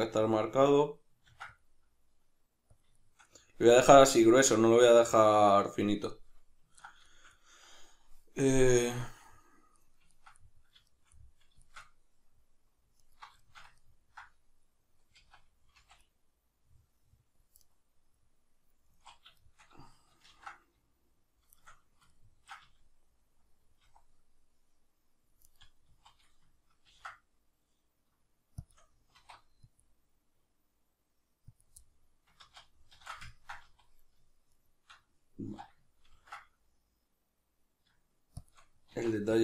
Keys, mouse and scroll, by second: 0.3 click, 0.5-2.8 middle drag, 1.3 ctrl+r, 2.8 click, 3.0-13.0 shift+middle drag, 13.0 alt+right click, 13.4-17.7 shift+middle drag, 15.2 z, 15.8 c, 17.7 right click, 18.9 z, 19.4-21.7 shift+middle drag, 20.3 ctrl+b, 21.7 shift+right click, 22.1-25.5 ctrl+middle drag, 22.7 z, 23.8 c, 25.5 right click, 25.9 z, 26.8 ctrl+b, 28.7 shift+click, 29.1 alt+e, 31.6 click, 31.8-34.5 middle drag, 32.5 ctrl+z, 33.7 z, 34.5 shift+right click, 35.5 z, 36.1 ctrl+b, 38.5 shift+click, 38.9 alt+e.